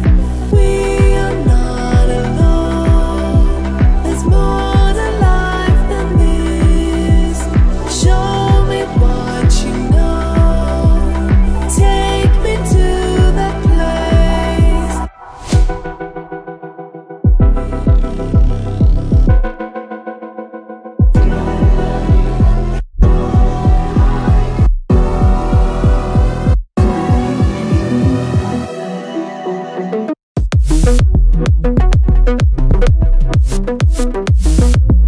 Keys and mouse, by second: 0.8-1.9 drag, 2.1-3.6 middle drag, 4.0 ctrl+middle click, 4.5 middle click, 4.8 middle click, 5.2 ctrl+middle click, 6.2 shift+a, 11.8 y, 12.3 g, 15.9 click, 16.6 middle click, 17.0 middle click, 17.7-20.6 drag, 20.9 click, 22.2 click, 22.7 ctrl+middle click, 23.0 middle click, 23.3 ctrl+middle click, 23.6 middle click, 24.5 ctrl+middle click, 25.0 click, 26.5 shift+a, 32.8 middle click, 33.3 click, 33.9 shift+a, 34.6 click.